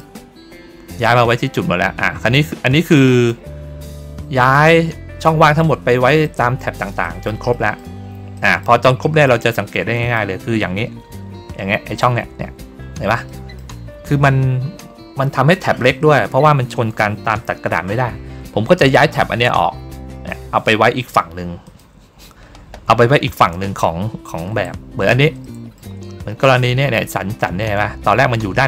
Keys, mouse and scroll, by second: 0.6-1.0 ctrl+scroll down 2, 1.8-2.3 ctrl+scroll down 3, 2.8 ctrl+middle click, 6.1 ctrl+middle click, 6.9 ctrl+middle click, 7.4 ctrl+middle click, 8.2 ctrl+middle click, 8.9 ctrl+middle click, 9.4 ctrl+middle click, 9.8 ctrl+middle click, 10.4-11.0 ctrl+scroll down 2, 13.2 middle click, 21.5 click, 23.5 ctrl+middle click, 24.0 ctrl+middle click, 24.8 ctrl+middle click, 25.3 middle click, 26.6 ctrl+middle click, 28.1 ctrl+middle click.